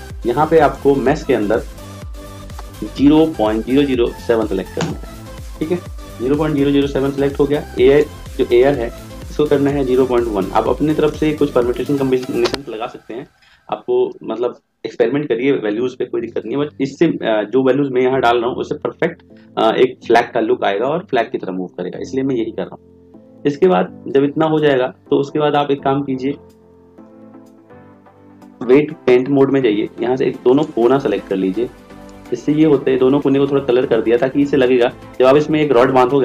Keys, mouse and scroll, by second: 3.9 0.